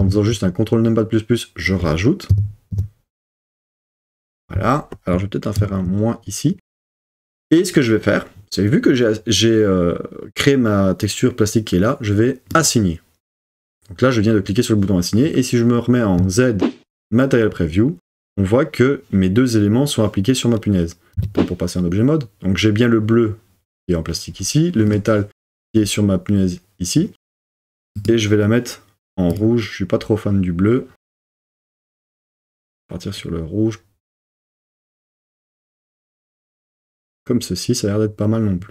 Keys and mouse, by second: 0.0 super+KP_Add, 2.3 super+KP_Add, 2.7 super+KP_Add, 3.2 super+KP_Add, 3.7 super+KP_Add, 5.6 super+KP_Subtract, 12.5 click, 16.2 z, 17.9 middle click, 21.2 Tab, 24.8 click, 28.0 click.